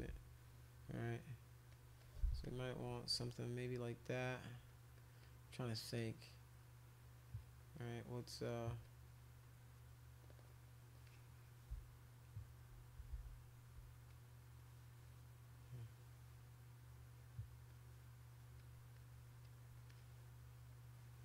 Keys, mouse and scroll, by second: 0.1 [, 1.0 click, 1.7 click, 2.0 click, 2.4 click, 3.2 click, 3.8 click, 4.3 click, 4.7 click, 5.0 click, 5.2 click, 5.5 click, 5.9-7.8 drag, 8.0 click, 8.4 click, 8.8 click, 9.4-10.9 drag, 11.0-12.2 drag, 13.1 ctrl+z, 14.1 click, 14.6 click, 15.0 click, 15.6-17.0 drag, 17.2 click, 17.7 click, 18.6 click, 18.9 click, 19.4 click, 19.9-21.2 drag.